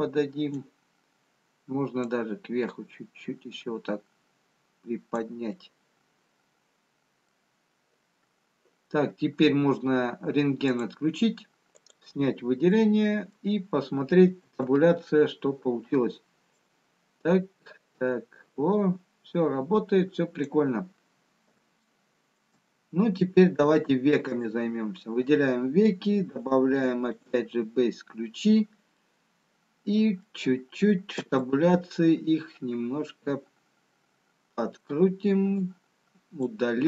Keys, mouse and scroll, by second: 3.6 click, 5.9 middle click, 11.3 click, 12.6 click, 14.3 middle click, 14.3-15.9 scroll down 3, 15.9 Tab, 15.9-17.6 scroll down 1, 17.6 click, 23.1 shift+middle click, 23.1-23.4 scroll up 4, 24.8 click, 24.8-26.7 scroll up 1, 26.7 click, 28.4 click, 30.1 middle click, 30.1-32.1 scroll up 1, 32.1 Tab, 34.4 click, 36.5 click.